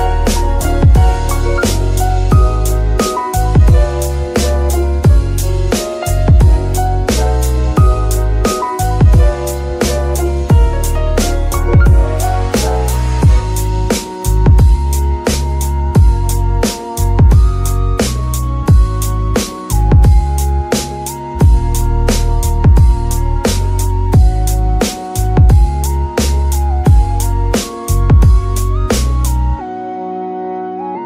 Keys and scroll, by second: 6.7 shift+d, 8.5 Tab, 10.1 shift+Tab, 10.6 shift+Tab, 10.9 shift+s, 12.7 Tab, 15.2 shift+s, 16.1 Tab, 17.1 KP_7, 18.0 shift+g, 18.5 z, 18.9 g, 20.3 ctrl+r, 24.3 KP_3, 24.8 KP_1, 25.4 z, 25.8 g, 27.3 ctrl+r, 28.7 KP_7.